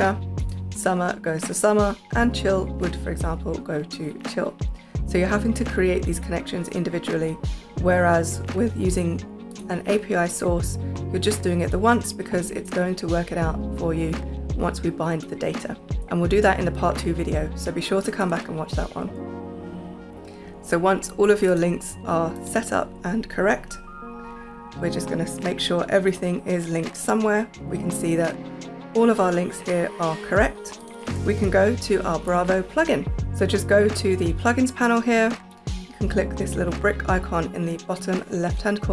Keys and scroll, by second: 25.3 super+a, 31.8 super+p, 33.2 space.